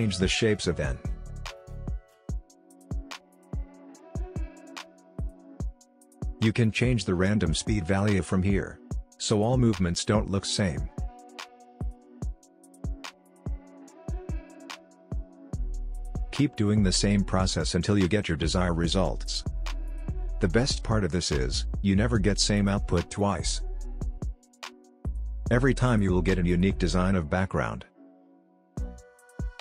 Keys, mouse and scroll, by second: 2.0 click, 10.2 drag, 10.5 space, 13.1 space, 13.7 click, 15.2 ctrl+d, 16.2-18.9 drag, 19.1 click, 19.7 ctrl+d, 20.0 click, 20.4 ctrl+z, 20.5 click, 24.1 ctrl+d, 24.3 click, 25.1 click, 25.6 click, 26.8 scroll up 1, 27.0 click, 27.1 space, 27.4 scroll down 1, 27.5 scroll up 1, 28.0 space, 28.1 click, 29.1 ctrl+d, 29.4 click, 29.5 ctrl+z.